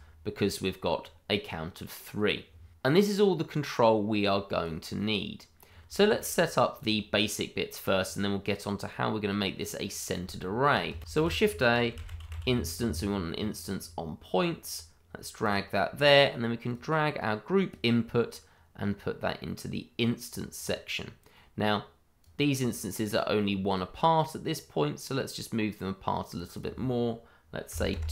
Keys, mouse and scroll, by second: 3.8 click, 5.7 scroll down 1, 5.9 shift+middle click, 6.8 click, 9.0-10.0 scroll down 1, 10.0-10.4 scroll up 1, 10.6 shift+middle click, 10.6 middle click, 10.7 shift+middle click, 11.1-12.3 typing, 14.6 click, 15.9-16.7 scroll down 1, 16.7 click, 18.0-18.9 scroll up 1, 18.9 click, 20.5-22.2 scroll down 1, 22.2 click, 27.7 2, 27.9 Return.